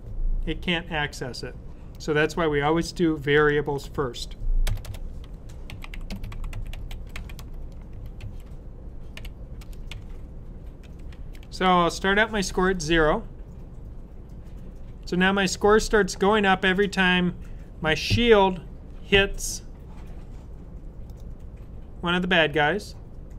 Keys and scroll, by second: 5.5-9.5 typing, 10.7-11.6 typing.